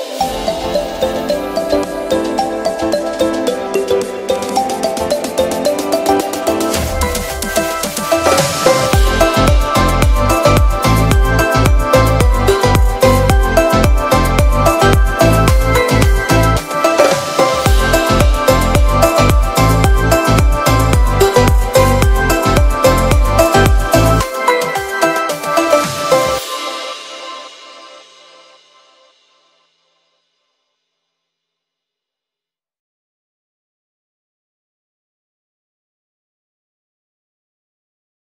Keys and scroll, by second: 23.6 super+a, 24.4 shift+super+c, 24.7 shift+super+v, 25.4 super+v, 29.7 z, 32.3 v.